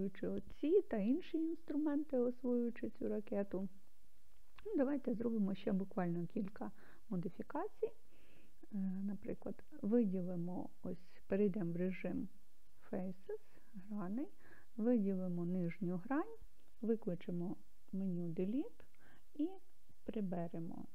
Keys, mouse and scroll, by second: 3.9-7.0 middle drag, 9.4 click, 11.9 click, 14.9 click, 18.0 x.